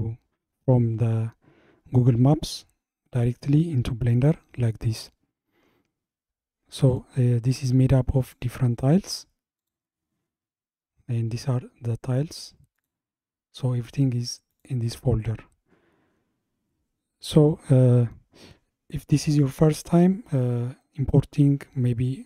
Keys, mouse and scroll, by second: 6.9 drag, 7.6 click, 8.3 click, 8.9 click, 9.6 click, 12.8 click, 14.5 click.